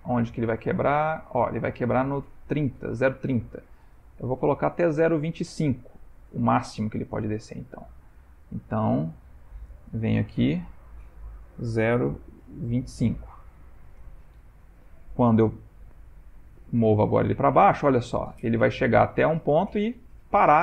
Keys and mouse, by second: 8.1 click, 8.6 click, 10.3 Left, 15.3 g.